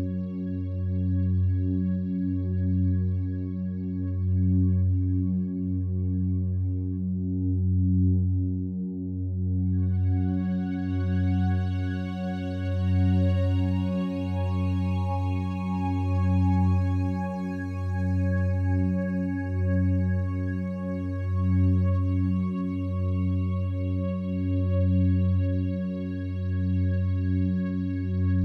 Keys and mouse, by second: 0.0 click, 0.6 click, 1.4 click, 2.2-3.6 drag, 3.8-5.8 drag, 5.8 g, 6.7 Escape, 11.3 click, 11.9 click, 13.1 Delete, 14.2 click, 18.8 click, 20.4 g, 21.7-22.8 drag, 22.9 Tab, 23.3 click, 24.4 e, 25.6 click, 25.8 g.